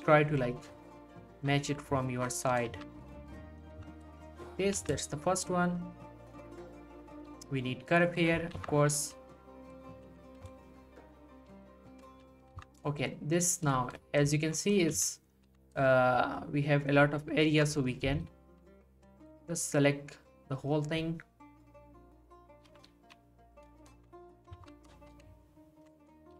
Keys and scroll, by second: 2.7 s, 3.1 g, 3.7 z, 4.8 z, 7.3 g, 8.6 z, 10.1 z, 11.4 g, 12.5 ctrl+z, 15.0 z, 18.1 g, 22.9 g, 24.6 ctrl+z, 26.2 g.